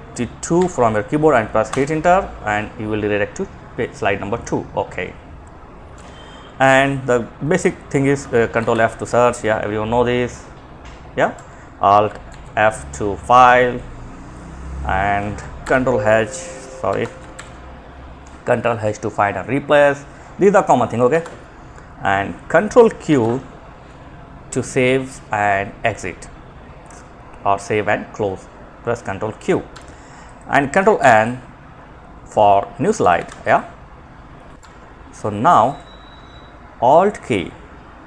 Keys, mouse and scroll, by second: 0.9 Return, 5.2 Escape, 6.6 click, 7.7 ctrl+f, 10.5 Escape, 11.5 alt+f, 12.6 Escape, 14.8 ctrl+h, 15.7 click, 16.1 Escape, 16.5 ctrl+h, 20.3 Escape, 22.3 ctrl+q, 28.9 Escape, 29.4 click, 30.2 ctrl+n, 32.2 alt+f, 34.5 Escape, 34.9 click.